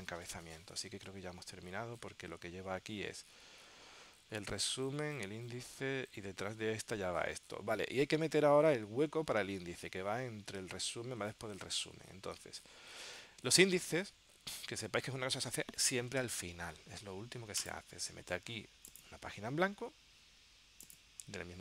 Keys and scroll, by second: 1.1 super+Tab, 10.7 super+Tab.